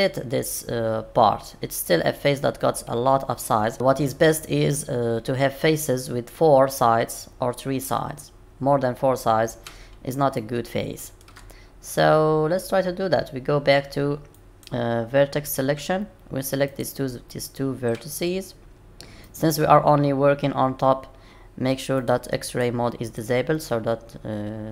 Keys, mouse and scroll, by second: 8.2-9.7 scroll up 2, 10.4 shift+middle click, 14.3 click, 16.7 click, 19.2 shift+click, 22.0 click, 22.5 click, 23.0 click.